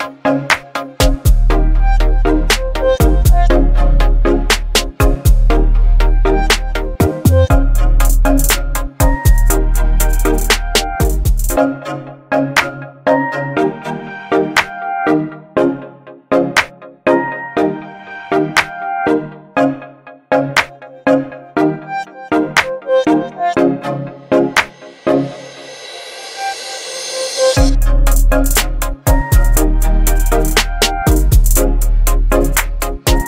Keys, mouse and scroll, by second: 2.7 alt+scroll up 1, 5.3 alt+scroll up 1, 7.0-7.9 drag, 15.2 v, 15.7 ctrl+0, 17.5 click, 19.1-23.5 alt+drag, 24.9 Left.